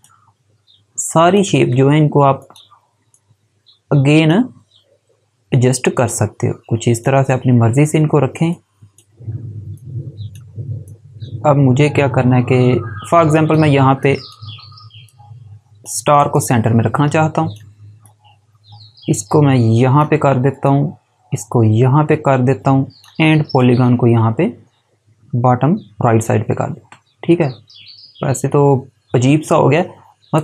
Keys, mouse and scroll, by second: 3.2 click.